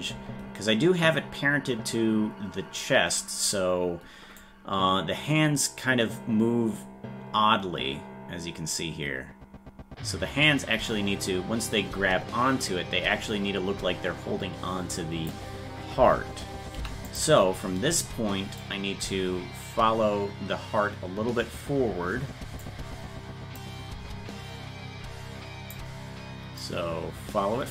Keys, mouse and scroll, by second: 4.4-15.3 drag, 18.6-22.6 drag, 23.6-25.7 drag, 26.6-27.7 drag.